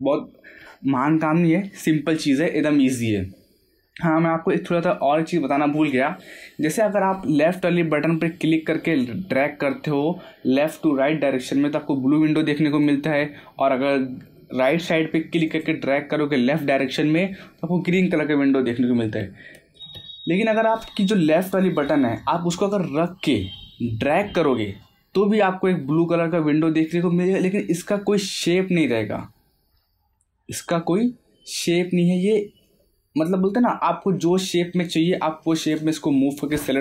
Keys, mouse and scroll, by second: 1.3-7.2 middle drag, 8.6 click, 12.6 click, 15.4 click, 23.0-33.0 drag.